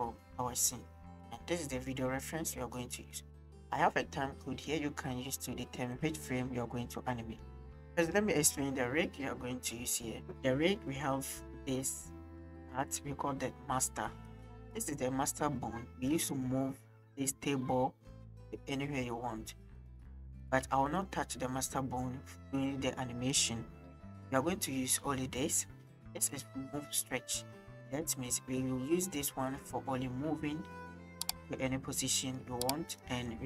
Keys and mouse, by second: 2.9 drag, 3.8 click, 5.9 middle drag, 7.1 middle click, 9.9 click, 10.2 middle click, 10.8 middle drag, 11.6 click, 14.3-14.6 drag, 20.3 shift+click, 25.3 click, 28.6-29.0 drag, 32.1 drag, 32.9-33.4 drag.